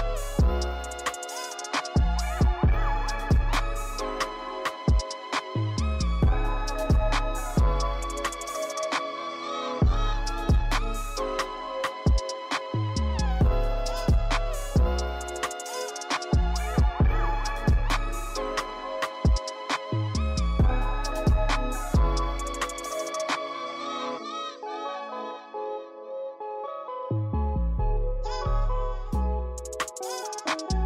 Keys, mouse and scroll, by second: 0.2-0.6 shift+middle drag, 0.6-1.9 scroll up 2, 1.9-2.5 drag, 4.3-7.0 drag, 7.3 shift+click, 7.6-8.7 right drag, 8.7 click, 9.0 right click, 9.9-10.3 scroll up 1, 10.3 click, 10.6 click, 11.4 click, 12.0-14.0 drag, 14.7-15.4 drag, 29.0 drag, 29.1 scroll up 1, 29.3 shift+middle click, 29.8-30.8 drag.